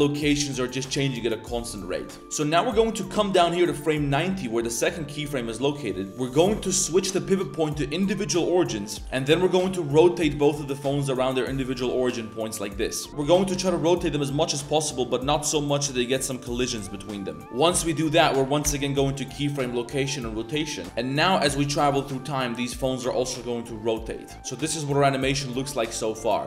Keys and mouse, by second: 0.9 middle click, 1.0-1.6 drag, 1.6-2.2 drag, 2.4-3.7 drag, 6.1-8.0 drag, 8.6 middle click, 12.9-13.2 drag, 13.1 ctrl+z, 17.4 click, 17.7 click, 21.1-21.7 middle drag, 21.7-25.5 drag, 24.3 space, 26.0-26.4 drag.